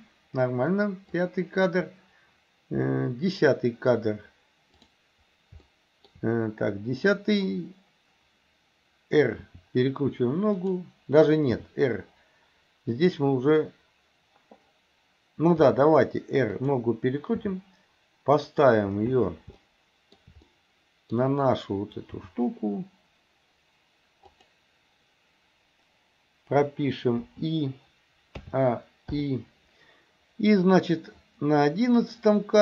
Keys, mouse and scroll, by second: 1.2-3.5 drag, 4.8 click, 5.7-6.2 shift+middle drag, 9.5 r, 11.6 r, 15.6 r, 17.4 g, 19.7-20.3 middle drag, 20.5 middle click, 22.2 g, 27.3 i, 28.4 a, 29.2 i.